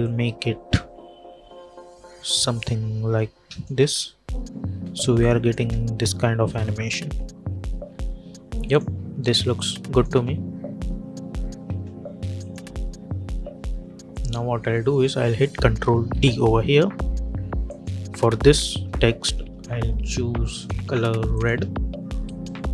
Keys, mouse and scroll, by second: 3.7 space, 5.1 click, 5.5 space, 7.7-8.5 scroll up 1, 8.5 click, 10.0 space, 12.3 click, 16.0 ctrl+d, 17.6 click, 20.4-22.7 drag.